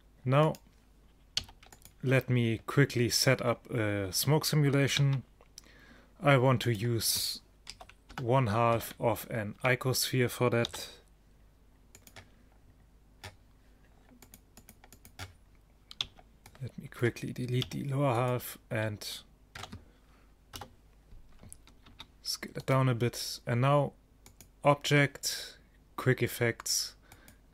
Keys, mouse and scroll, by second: 0.5 click, 1.5 x, 5.0 shift+a, 7.8 KP_1, 8.2 KP_5, 8.8-10.8 middle drag, 9.6 Tab, 10.8 a, 12.0-14.1 drag, 14.4-17.0 drag, 16.1 b, 17.8 x, 19.7 Tab, 20.6 KP_0, 22.0 s.